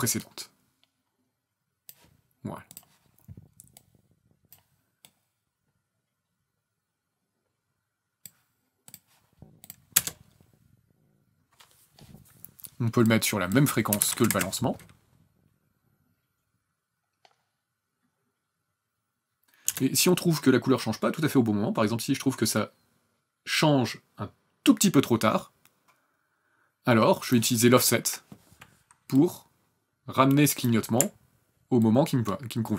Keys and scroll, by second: 9.9 KP_0, 14.0 KP_5, 14.3 KP_Enter, 19.7 KP_0.